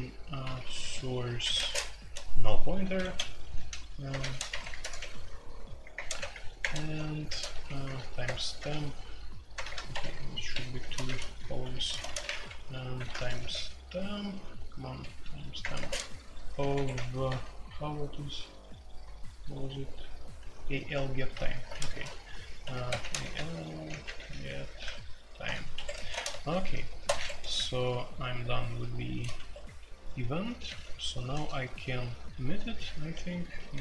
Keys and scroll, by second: 0.4-13.4 typing, 15.0-16.9 typing, 17.2 super+j, 17.7 super+j, 19.3-20.4 typing, 21.3 super+k, 21.4 super+k, 21.9-24.8 typing, 25.4 Return, 25.7 Escape, 25.9-28.4 typing, 27.0 Escape, 29.3 Escape, 30.1-33.8 typing.